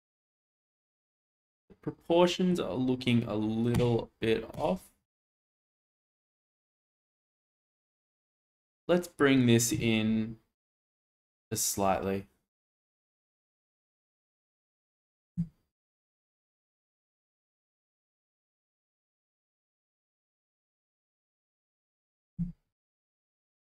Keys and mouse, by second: 1.0-2.5 middle drag, 4.5 click, 8.2 Tab, 8.9 click, 11.0 g, 11.1 x, 13.4 click, 14.1 Tab, 14.4 click, 16.2 g, 16.3 z, 16.7 x, 18.7 click, 18.9-19.6 middle drag, 20.1-21.5 middle drag, 21.7 Tab, 22.1 click, 22.4 Tab, 22.8 click, 23.2 middle drag.